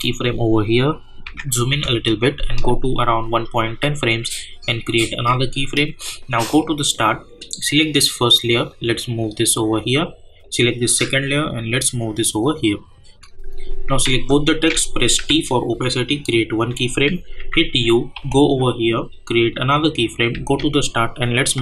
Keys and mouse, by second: 1.2 =, 1.7 =, 5.0-14.0 drag, 14.0 ctrl+a, 15.1 t, 16.3 click, 17.4-18.6 typing, 19.5 click, 20.3 j, 21.5 click.